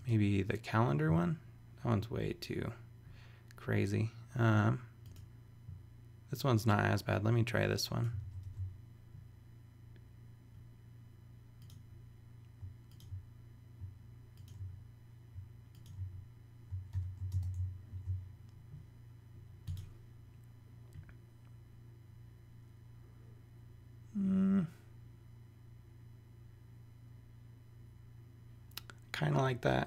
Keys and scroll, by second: 8.4 super+i, 16.9 super+v, 17.3 super+space, 17.9 super+s.